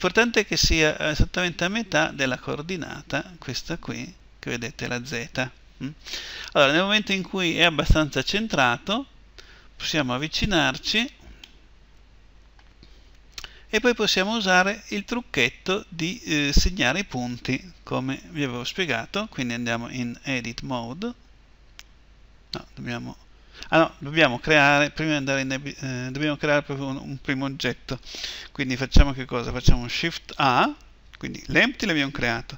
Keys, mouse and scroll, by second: 8.9-13.2 middle drag, 14.5-19.0 middle drag, 20.1 Tab, 25.1 Tab, 29.9 shift+a.